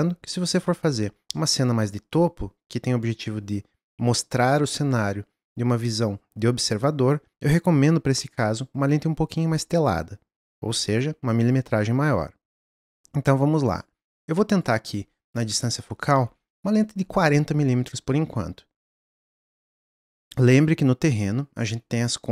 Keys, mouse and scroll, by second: 13.7 click, 14.5-22.3 drag, 20.2 n.